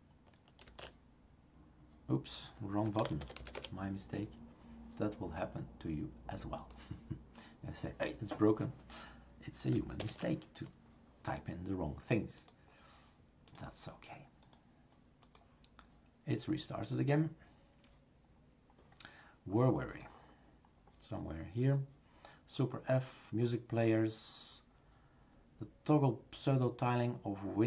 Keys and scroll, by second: 0.7 shift+super+x, 10.0 shift+super+Return.